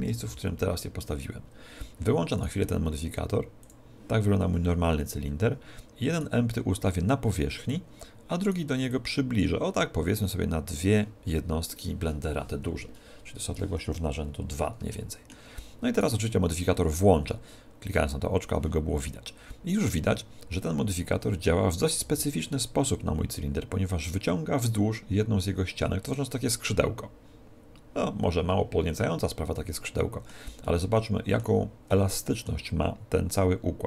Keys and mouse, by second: 0.1 KP_1, 0.3 z, 1.7 middle click, 2.4 right click, 3.6 click, 5.3-7.0 middle drag, 6.2 right click, 7.0 click, 8.5 right click, 9.0 click, 15.0-16.0 middle drag, 16.0 right click, 17.9 click, 22.1 z, 22.6-24.3 middle drag, 30.7-33.8 middle drag.